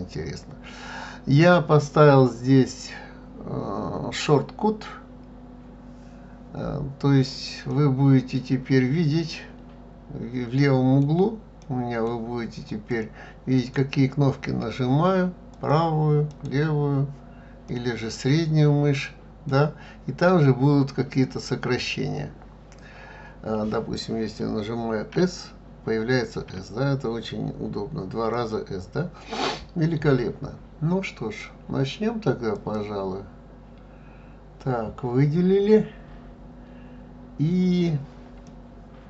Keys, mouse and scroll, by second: 7.7-10.7 middle drag, 11.6 middle click, 12.7 click, 13.5-15.5 right drag, 15.5 click, 17.1 right click, 17.6-20.7 middle drag, 25.1 s, 26.5 s, 28.3 click, 32.5 click, 38.4-39.0 middle drag.